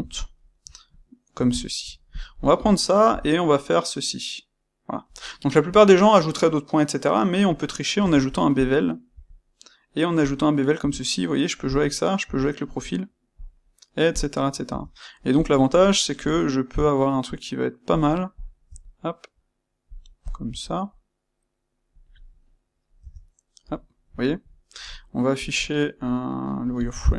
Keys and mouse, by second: 0.0-2.0 ctrl+middle drag, 2.0 click, 5.1 click, 7.9 space, 8.6 space, 14.1 click, 14.6 Tab, 15.3 click, 18.3 click, 20.1 click, 22.0 click, 22.2-25.3 middle drag, 22.9 Tab, 27.0 click.